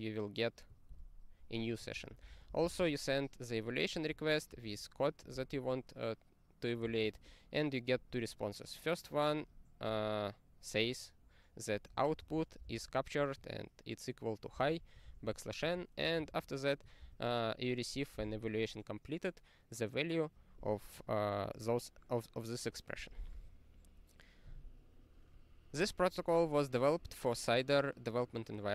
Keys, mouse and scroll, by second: 0.9 ctrl+g, 1.9 ctrl+n, 2.2 ctrl+space, 2.2 ctrl+n, 2.4 ctrl+n, 2.6 ctrl+n, 2.8 ctrl+n, 4.5 ctrl+g, 5.3 ctrl+n, 9.3 click, 9.5 double click, 9.5 double click, 12.2 ctrl+g, 12.3 ctrl+a, 12.6 ctrl+space, 12.6 ctrl+e, 14.5 ctrl+g, 15.1 ctrl+n, 15.2 ctrl+n, 15.6 ctrl+a, 16.2 ctrl+alt+@, 17.0 ctrl+g, 21.1-22.1 scroll down 27, 23.0 click, 23.8-26.6 scroll up 27, 26.6-26.9 scroll down 9.